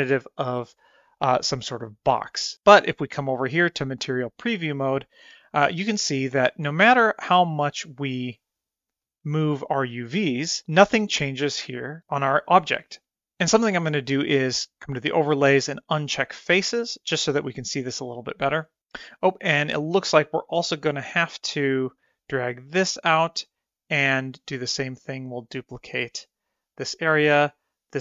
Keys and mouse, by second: 0.5 click, 1.4-2.3 drag, 3.0 click, 3.7 shift+middle click, 4.1 middle click, 4.4 shift+middle click, 4.6 middle click, 5.1 middle click, 5.5 middle click, 5.5 click, 6.8-8.2 drag, 8.8-10.6 middle drag, 14.6-16.6 drag, 17.0-18.8 middle drag, 20.9 click, 22.8-24.2 drag, 25.5 click, 27.3 click.